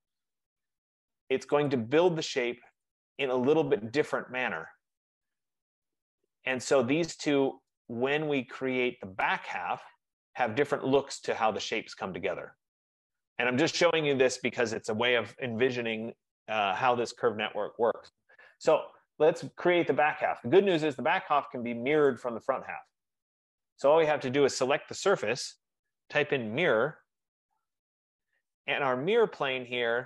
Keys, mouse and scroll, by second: 1.8 click, 2.9 click, 4.1 F15, 6.3 right click, 7.0 middle click, 7.2 middle click, 10.3 right click, 11.3 click, 11.8 click, 13.6 middle click, 13.9 middle click, 16.7-18.4 scroll, 20.9 right click, 21.5 middle click, 21.9 middle click, 22.1 middle click, 22.4 click, 26.1-27.6 typing, 27.5 Return.